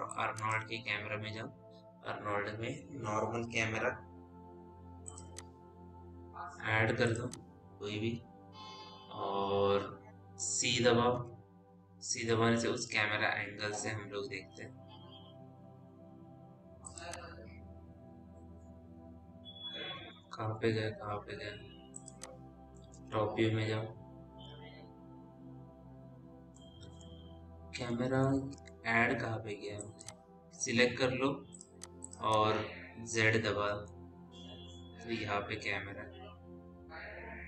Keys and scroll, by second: 11.6 c, 19.2 z, 23.5 t, 24.2 w, 28.9 w, 34.5 z.